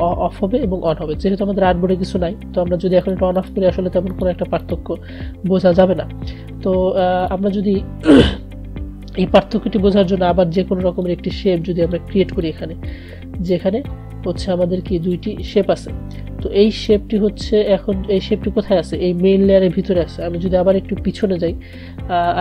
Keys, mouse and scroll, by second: 3.2 click, 7.4 click, 11.2-15.1 drag.